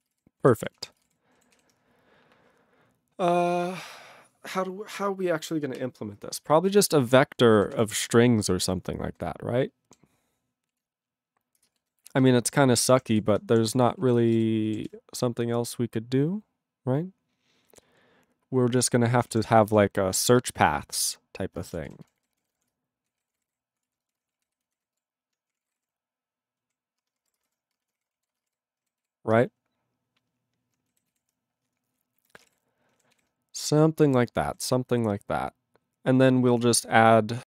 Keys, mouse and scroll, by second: 0.0 ctrl+space, 0.1 ctrl+g, 0.7 ctrl+s, 0.8 ctrl+a, 0.9 ctrl+space, 1.0 ctrl+e, 1.0 ctrl+g, 1.6 ctrl+s, 7.8 ctrl+s, 7.9-9.2 ctrl+n, 9.8 ctrl+p, 11.3 ctrl+e, 11.7 Return, 12.0-14.0 typing, 14.2 ctrl+space, 14.3 ctrl+n, 14.4 ctrl+w, 15.0 ctrl+s, 19.3 ctrl+o, 19.3 Tab, 20.1 shift+s, 20.4 BackSpace, 21.6-28.1 typing, 24.0 ctrl+e, 28.0 ctrl+e, 28.3 ctrl+a, 28.4 ctrl+e, 28.5 ctrl+g, 29.1 ctrl+s, 31.1 ctrl+s, 32.2 ctrl+a, 32.4 ctrl+space, 32.5 ctrl+g, 33.1 ctrl+s, 34.6 ctrl+a.